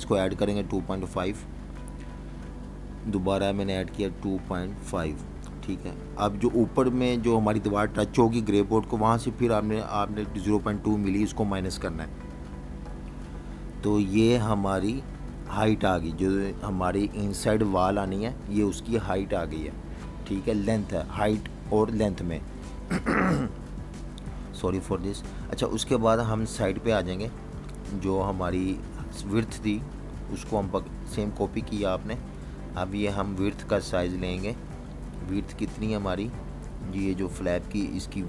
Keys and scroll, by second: 3.9-5.3 typing, 6.4 Return, 9.8 -, 10.2 0, 11.3 ., 13.7 2, 16.8 Return, 17.7 v, 18.5 super+-, 22.7-23.2 typing, 24.3 super+y, 24.8 v, 25.9 super+y, 34.6 super+-, 34.8 super+-, 35.3 v, 35.4 space.